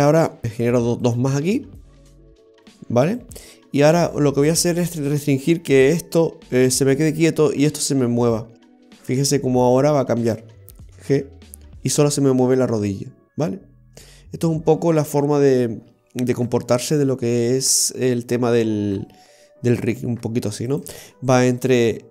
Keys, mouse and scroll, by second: 1.1 right click, 1.9 right click, 2.6 right click, 3.2 right click, 9.0-9.3 scroll down 2, 9.3 middle click, 10.3 right click, 11.0 v, 11.2 g, 21.2 middle click.